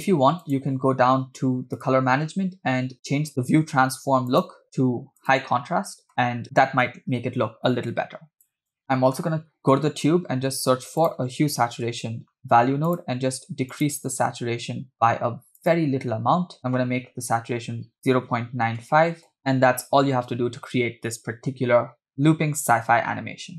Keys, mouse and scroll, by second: 0.4 click, 1.2 scroll down 2, 1.8 click, 2.2-3.2 scroll down 1, 4.3-5.7 drag, 6.2 space, 8.2 space, 8.3 click, 8.3 scroll down 2, 8.6 click, 8.6 scroll up 4, 8.9 middle click, 9.6 middle drag, 10.5 shift+a, 14.9-16.5 scroll up 6, 16.6-19.4 drag, 17.6 BackSpace, 17.7 BackSpace, 22.7 space.